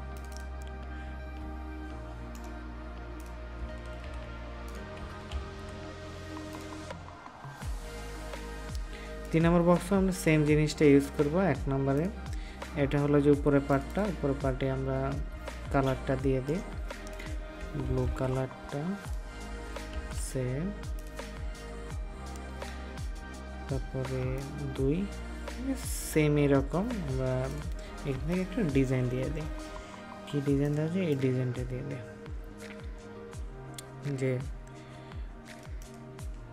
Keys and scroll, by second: 4.0 ctrl+v, 5.2 ctrl+s, 18.0 ctrl+v, 19.8 ctrl+s.